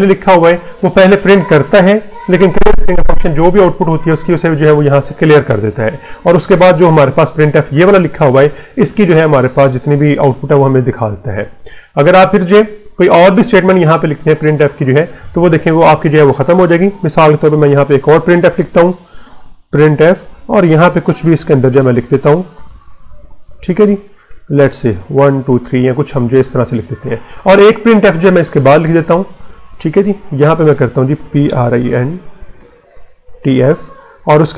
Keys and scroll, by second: 6.7 Return, 16.0 \, 17.1 BackSpace, 17.4 Return, 18.1-21.1 typing, 21.5 Left, 22.5 shift+', 22.9 Left, 24.5-26.7 typing, 29.3 Return, 30.7-31.9 typing, 33.1-34.5 typing.